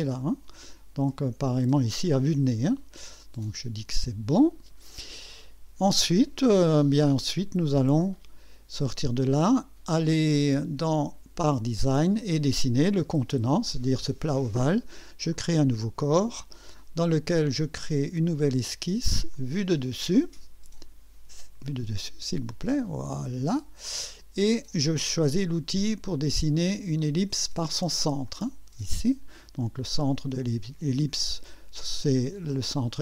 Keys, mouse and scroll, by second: 4.0 click, 8.1 click, 10.3 click, 11.5 click, 15.3 click, 18.1 click, 19.3 click, 21.7 click, 22.8 click, 28.3 click.